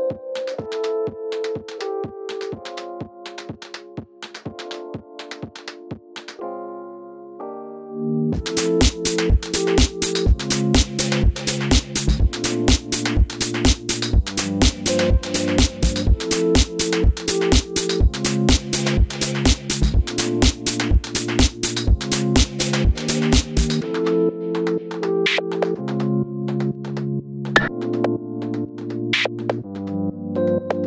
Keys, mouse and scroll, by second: 2.2 click, 3.6 click, 4.2 z, 5.1-7.0 middle drag, 5.7 scroll up 1, 6.1 scroll down 1, 6.3 ctrl+click, 7.0 ctrl+click, 7.2 middle click, 7.5 ctrl+click, 7.7 middle click, 8.0 ctrl+click, 8.1-10.7 middle drag, 8.6 scroll down 2, 9.0 z, 9.4 ctrl+a, 10.7 click, 10.8 scroll up 2, 10.9-13.3 middle drag, 12.0 ctrl+a, 13.4 scroll down 1, 13.6 click, 13.8 Tab, 14.2 middle click, 14.5 ctrl+s, 14.7 shift+middle click, 15.2 middle click, 15.5 click, 24.3 middle click, 25.0 alt+h, 25.2 middle click, 25.4 click, 25.9-27.0 middle drag, 25.9-26.2 scroll up 1, 27.0 click, 27.9 Tab, 28.5 2, 28.7 click, 29.1 g, 29.8 click, 30.1 g.